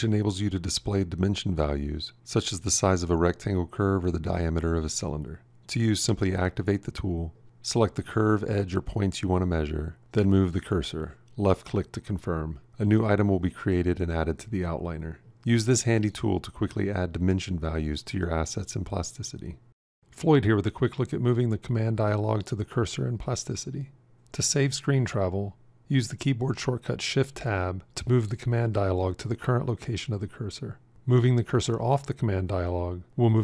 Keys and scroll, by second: 5.7 f, 13.0 ctrl+=, 26.9 shift+Tab.